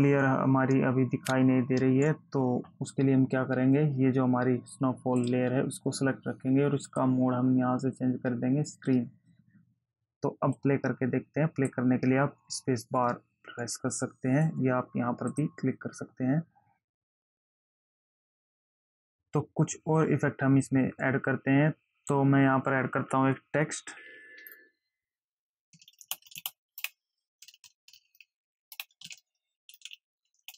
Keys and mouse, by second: 2.1 space, 5.5 click, 7.2 click, 9.1 click, 10.9 click, 15.7 click, 24.3 t, 24.7 click, 25.7 Caps_Lock, 27.0 Return, 27.4-28.1 typing, 28.9 Return, 29.9 t.